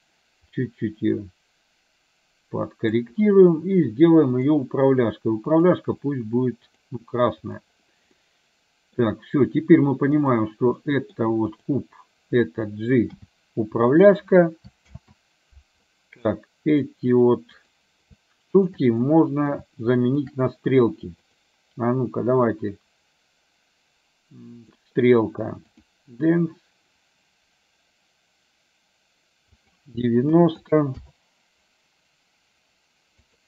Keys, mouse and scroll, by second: 0.5-3.0 drag, 5.7-6.9 drag, 7.7 click, 8.3 middle click, 10.8 middle click, 11.5 click, 13.1 g, 15.0 ctrl+z, 16.4 middle click, 17.6 click, 19.0 middle click, 20.2 shift+click, 21.3-24.8 drag, 25.9 click, 29.7-31.2 drag, 33.3-33.4 drag.